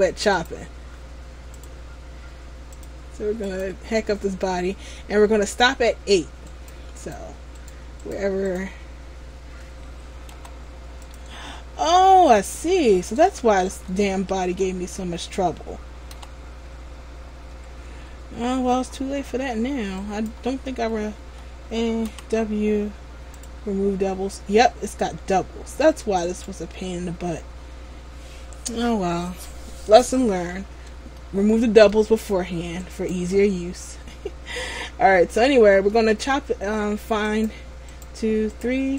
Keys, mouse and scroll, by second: 1.7 click, 6.6 right click, 10.4 g, 11.9 middle click, 12.9 ctrl+z, 13.8 a, 14.2 a, 14.7-15.3 scroll down 4, 16.2 w, 17.3 Tab, 18.4-19.0 scroll up 2, 19.0-20.6 scroll down 5, 20.1 right click, 20.6 Tab, 21.4 a, 22.2 w, 25.0 Tab, 25.8 scroll up 1, 26.3 scroll up 1, 26.4 right click, 27.7 scroll up 1, 30.7-31.3 scroll up 2, 31.3 middle click, 33.0 right click, 36.1 middle click, 37.5-38.9 right click.